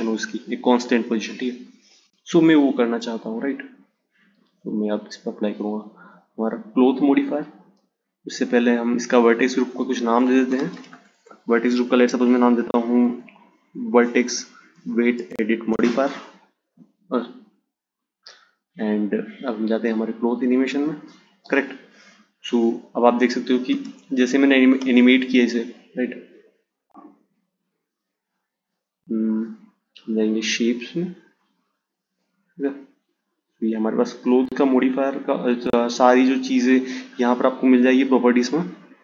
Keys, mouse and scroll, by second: 4.6 click, 6.6 click, 8.0-11.3 drag, 18.5 click, 22.4 space, 23.6 space, 26.1-29.3 drag, 29.9 click, 30.7 click.